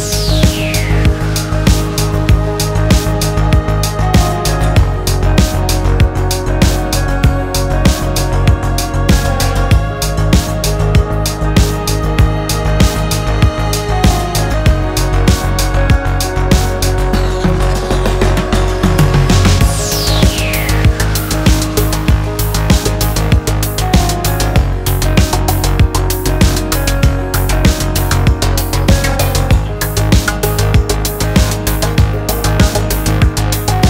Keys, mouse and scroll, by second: 5.6 BackSpace, 8.2-9.4 drag, 9.9-11.2 scroll up 1, 11.4-12.3 shift+middle drag, 14.5 click, 17.4-20.9 drag, 21.4 click, 22.7 click, 23.6 click, 25.7-31.0 drag, 32.8-33.8 drag.